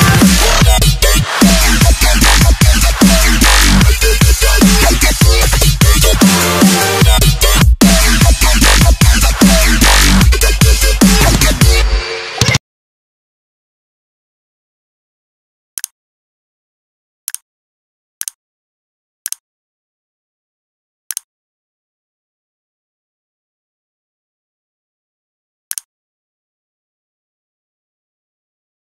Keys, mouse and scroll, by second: 0.4 click, 0.6 click, 0.8 click, 1.0 click, 6.4 click, 6.6 click, 6.8 click, 8.2 ctrl+c, 8.7 click, 9.8 ctrl+v, 10.5 click.